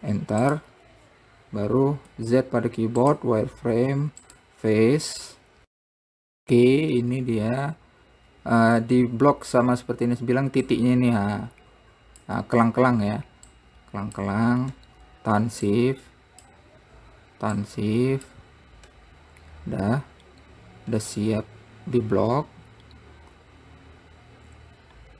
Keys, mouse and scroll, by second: 2.7 z, 4.8 click, 9.7 scroll up 1, 11.0 click, 13.9 shift+click, 16.0 shift+click, 17.9 shift+click, 20.3 scroll down 1.